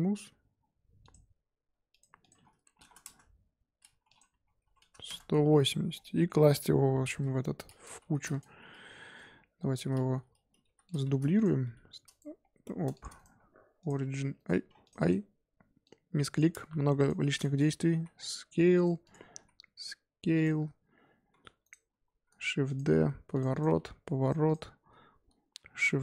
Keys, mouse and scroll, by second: 1.0 click, 1.9 click, 2.2-5.5 drag, 5.5-5.9 middle drag, 5.9 scroll down 1, 6.0-6.5 middle drag, 6.5 scroll up 2, 7.1 KP_7, 8.0 g, 9.5 f, 10.6 g, 11.1 shift+d, 11.6 s, 12.9 shift+click, 13.1-17.3 right drag, 17.3 click, 17.9 s, 19.0 click, 19.3 s, 21.6-22.1 right drag, 22.1 shift+d, 22.9 r, 23.5 click, 23.7 r, 24.4 click, 25.7 shift+d.